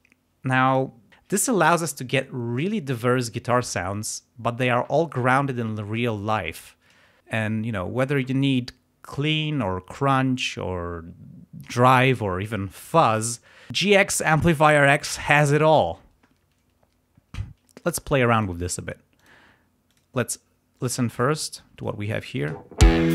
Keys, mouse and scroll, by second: 0.6 click, 17.8 click, 19.1 click, 19.8 click, 21.2 ctrl+scroll up 2, 22.1 ctrl+click, 22.4 ctrl+space.